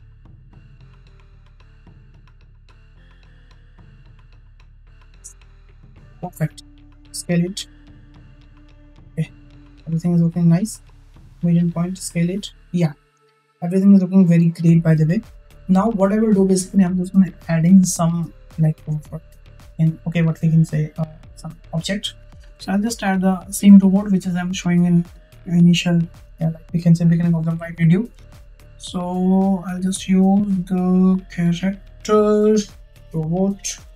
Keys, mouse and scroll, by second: 1.1 r, 6.6 s, 8.8-10.8 drag, 11.0 click, 11.5 s, 22.8-28.4 drag, 30.3-32.2 drag, 32.6-33.9 drag.